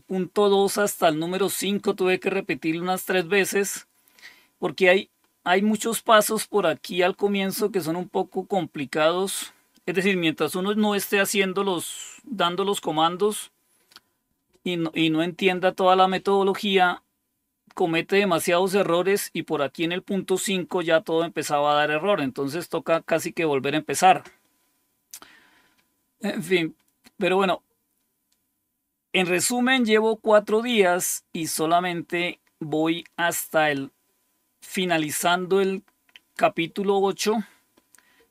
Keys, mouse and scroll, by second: 20.2-21.0 scroll down 2, 27.3-28.0 scroll down 2, 30.2-34.2 scroll down 7, 35.1-36.4 drag.